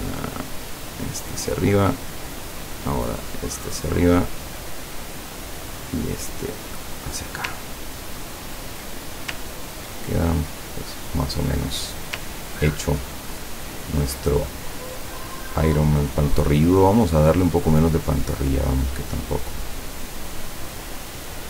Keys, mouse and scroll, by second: 0.4-1.6 drag, 2.3 click, 3.0 click, 4.5 click, 5.9-7.5 drag, 7.7-8.0 ctrl+scroll down 2, 8.2 ctrl+scroll down 2, 9.5-9.9 ctrl+scroll down 2, 10.2-11.5 ctrl+drag, 12.8 ctrl+scroll down 2, 13.5-14.1 ctrl+scroll up 4, 15.4 middle click, 16.1 click, 17.0 click, 18.0-21.4 drag.